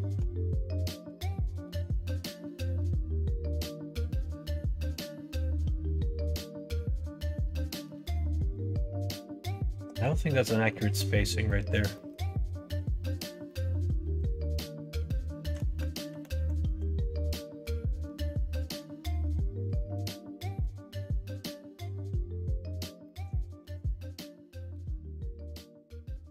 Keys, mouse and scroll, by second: 1.0 g, 5.1-8.5 middle drag, 9.6 middle click, 10.5 middle click, 11.4 scroll up 1, 11.5 middle click, 11.6-12.1 scroll down 2, 11.9 middle click, 13.4-15.5 middle drag, 16.0 ctrl+z, 16.3 ctrl+z, 16.6 ctrl+z, 17.6-18.7 middle drag, 20.5 middle click, 23.0 middle click, 23.5 shift+a.